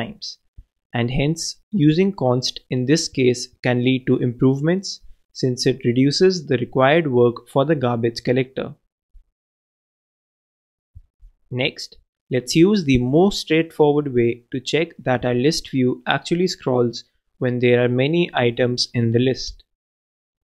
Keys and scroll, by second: 17.3 super+d.